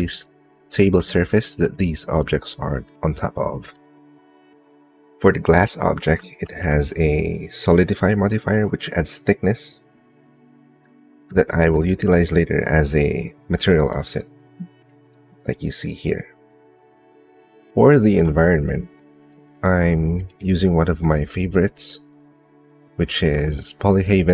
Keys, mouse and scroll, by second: 0.2 shift+middle click, 1.0 ctrl+middle click, 1.9 click, 2.6 middle click, 3.3 click, 3.3 right click, 4.6 shift+middle click, 10.6 middle click, 11.0 click, 11.3 shift+click, 11.5 shift+middle click, 11.8 middle click, 12.0 click, 12.6 middle click, 13.5 middle click, 22.2-24.0 ctrl+middle drag, 24.1 middle click.